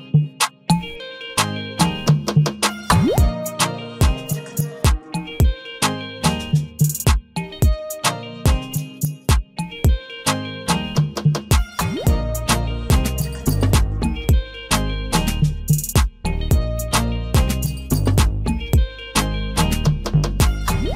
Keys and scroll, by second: 4.8 ctrl+a, 20.8 ctrl+a.